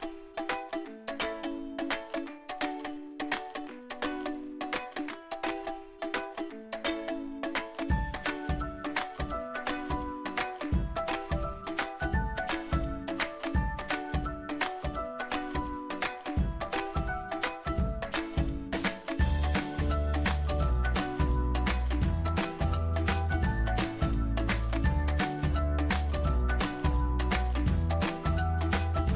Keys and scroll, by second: 27.3 ctrl+d.